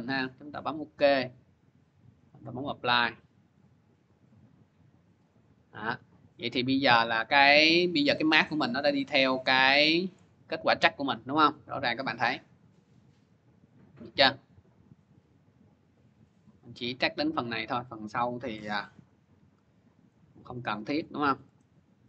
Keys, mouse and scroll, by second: 0.6 click, 2.2 click, 3.3 click, 5.0 click, 7.7-10.2 drag, 17.5-20.9 drag, 18.4 b, 21.4 right click.